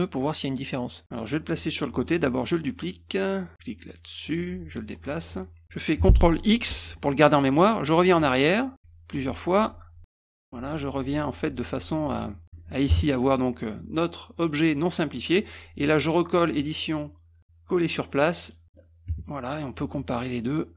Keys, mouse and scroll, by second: 4.3 click, 4.8 ctrl+click, 6.7 ctrl+x, 8.8 ctrl+z, 9.2 ctrl+z, 9.6 ctrl+z, 10.0 ctrl+z, 10.3 ctrl+z, 10.6 ctrl+z, 10.7 ctrl+z, 10.9 ctrl+z, 11.1 ctrl+z, 11.2 ctrl+z, 11.3 ctrl+z, 11.9 click, 12.1 click, 14.6 click, 16.7 click, 18.5 click, 18.6 middle click.